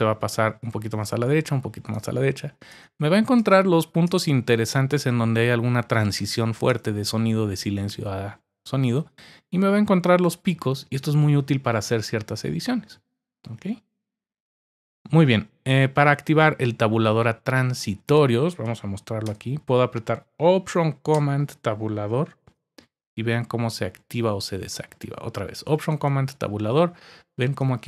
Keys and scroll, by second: 1.0 Tab, 1.9 Tab, 2.7 Tab, 3.4 Tab, 22.4 alt+super+Tab, 25.9 alt+super+Tab.